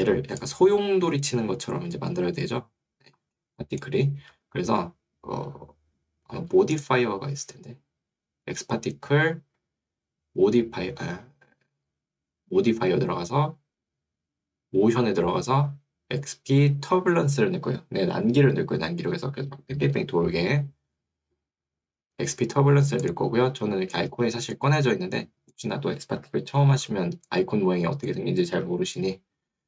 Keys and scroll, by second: 28.6 Escape.